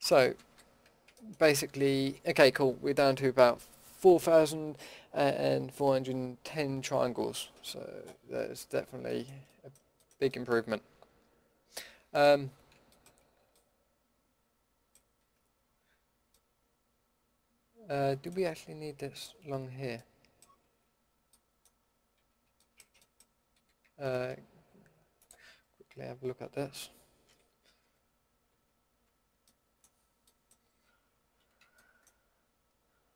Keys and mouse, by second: 0.2 Tab, 0.4 a, 9.0-11.7 middle drag, 19.1-19.9 drag, 19.7 middle click, 20.0 middle drag, 20.4 middle click, 20.8 z, 22.1 z, 23.8 a, 25.5-27.0 middle drag, 27.2 l, 27.8 l, 28.4 l, 29.0 l, 29.4 middle drag, 30.9 l.